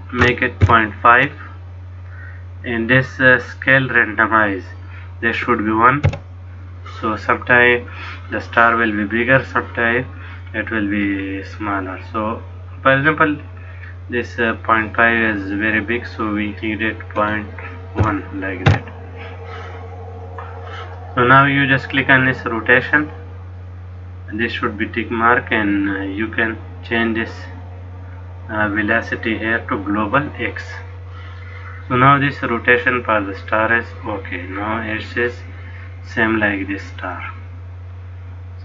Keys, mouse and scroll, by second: 3.8 click, 10.9 click, 22.8 click, 25.3 click, 28.0 click.